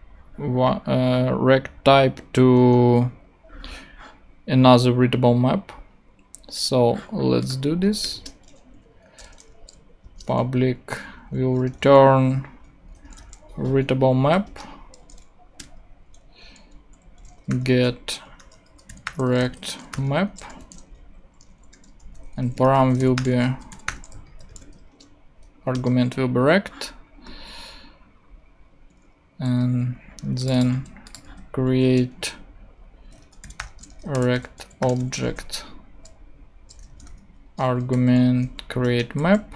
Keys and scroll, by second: 8.0 Return, 8.8-9.7 typing, 10.0 Return, 12.5-13.7 typing, 14.5 Return, 15.6 space, 17.0-20.6 typing, 21.7-24.9 typing, 24.5 super+space, 25.7 shift+Return, 30.7 super+c, 31.3 super+v, 32.0 super+space, 32.9-35.6 typing, 36.7-37.9 typing, 38.8 Return, 39.2 ;.